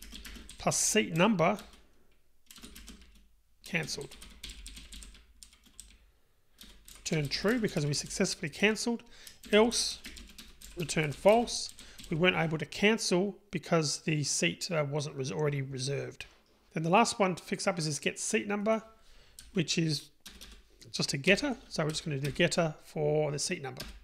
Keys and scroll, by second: 1.7 Return, 21.3 super+n.